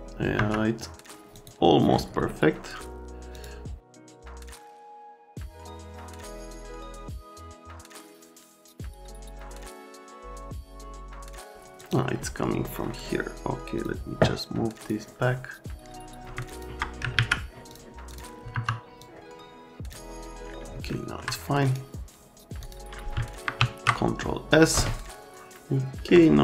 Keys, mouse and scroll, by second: 0.4 F3, 1.3 click, 3.3 click, 3.9 right click, 4.0 click, 4.1 middle click, 4.2 click, 4.6 click, 5.0 click, 5.0 F3, 5.1 middle click, 5.7 click, 5.8 F3, 5.9 click, 6.2 middle click, 6.6 alt+middle click, 6.8 F3, 7.4 middle click, 7.7 F3, 7.7 F3, 7.9 click, 8.5 alt+middle click, 8.5 middle click, 9.0 alt+middle click, 9.7 click, 10.2 alt+middle click, 10.4 click, 10.5 F3, 10.6 alt+middle click, 11.2 right click, 11.4 click, 11.4 F3, 11.8 click, 12.6 middle click, 13.8 click, 14.8 click, 16.4 click, 17.1 alt+q, 17.7 click, 18.1 click, 18.5 F3, 19.0 click, 20.8 alt+middle click, 21.6 right click, 22.6 click, 23.6 ctrl+s.